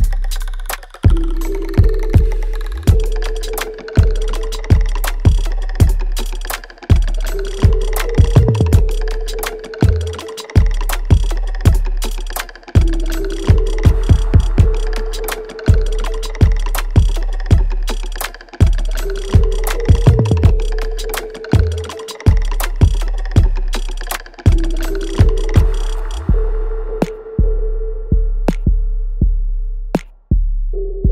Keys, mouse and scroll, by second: 0.3 right click, 0.9 click, 1.2 alt+right click, 1.6-3.3 alt+drag, 3.2 s, 3.8 alt+middle click, 4.2 alt+right click, 5.8 click, 5.8-8.0 alt+drag, 8.0 alt+right click, 8.4 alt+middle click, 8.8 alt+right click, 9.3 alt+click, 9.8 right click, 10.8-11.2 scroll down 1, 11.2-12.8 drag, 12.8 shift+right click, 14.4 alt+right click, 15.1 alt+click, 15.6-17.0 alt+middle drag, 17.0 right click, 18.3 click, 18.7 alt+click, 20.2 alt+click, 20.9 alt+right click, 21.5 alt+middle click, 22.6 alt+right click, 23.1-24.6 alt+drag, 24.6 alt+right click, 25.3 alt+click, 25.7 alt+right click, 26.3-28.3 alt+middle drag, 28.3 click, 30.0 right click, 31.0 click.